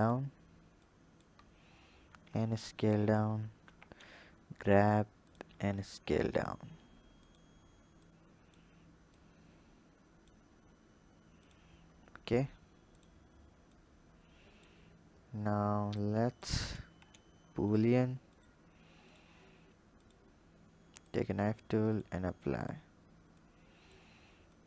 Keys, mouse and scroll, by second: 0.7 click, 1.5 scroll up 4, 2.2 s, 3.5 g, 5.5 s, 7.9 click, 9.1 click, 10.4 s, 13.7 click, 14.9-15.9 scroll up 4, 15.9 click, 16.6 click, 17.6 drag, 18.1-20.0 drag, 21.8 click, 23.2 click, 24.4-24.6 drag.